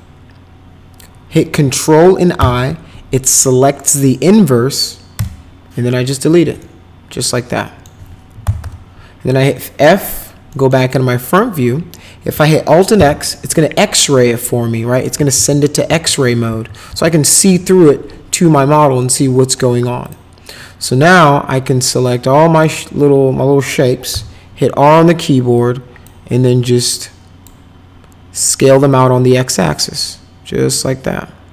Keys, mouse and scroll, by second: 2.4 ctrl+i, 5.1 Delete, 6.6-7.8 alt+middle drag, 8.1-9.1 typing, 9.5 middle click, 10.5 middle click, 12.9 alt+x, 15.3 alt+x, 15.8 alt+x, 16.5 alt+x, 16.8 alt+x, 18.7 middle click, 20.0 click, 22.1 click, 24.1 r, 25.5 click, 27.0 click, 28.9-31.5 drag.